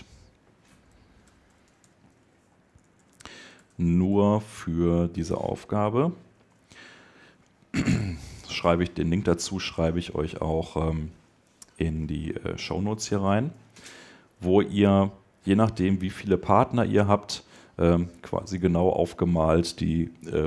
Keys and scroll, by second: 2.4 BackSpace.